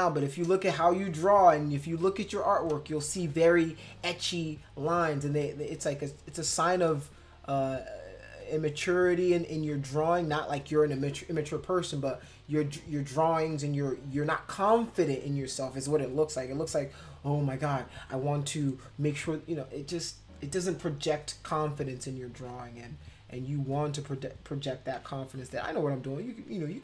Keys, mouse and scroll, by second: 1.9 [, 2.8 space, 3.0 click, 6.0 click, 6.4 click, 7.0 click, 7.6 click, 8.0 click, 8.6 click, 9.5 click, 10.0 click, 22.4 click, 22.7 click, 23.0 click, 23.3 click, 23.7 click, 24.1 click, 25.0 ], 25.6 click, 26.5 click.